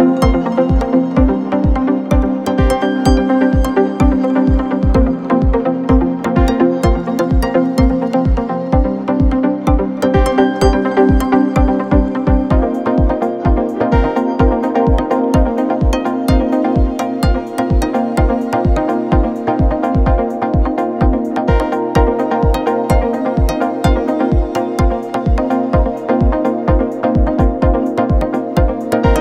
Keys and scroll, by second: 3.2 space, 4.8 ctrl+z, 5.6 ctrl+-, 6.8 space, 7.4 space, 7.6 ctrl+=, 8.1 ctrl+=, 12.2 ctrl+=, 13.5 space, 15.8 space, 21.5 space, 22.2 space, 22.4 ctrl+=, 25.5 space, 27.7 space.